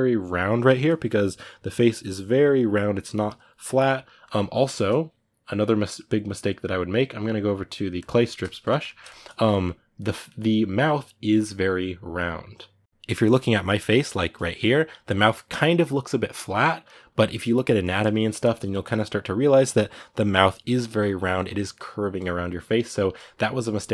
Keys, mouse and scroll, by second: 7.8 click, 8.0-22.6 shift+middle drag, 22.6-23.9 drag.